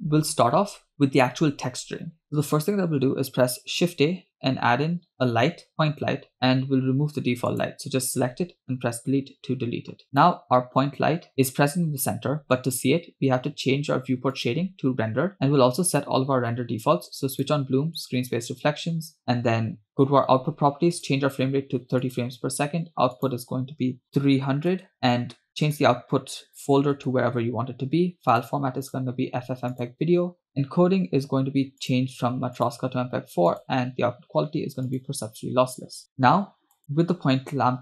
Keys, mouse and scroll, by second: 0.0 middle click, 3.7 shift+a, 7.6 click, 9.0 Delete, 10.2 click, 15.0 click, 16.0 click, 17.5 drag, 18.2 click, 21.0-22.5 drag, 23.4-24.9 drag, 24.4 0, 25.4 scroll down 2, 25.7-27.2 drag, 26.8 /, 28.4 click, 28.9-30.1 drag, 30.5-31.3 scroll down 4, 30.5 click, 31.9-32.8 drag, 33.6-35.3 drag, 36.1 middle click, 36.8 click.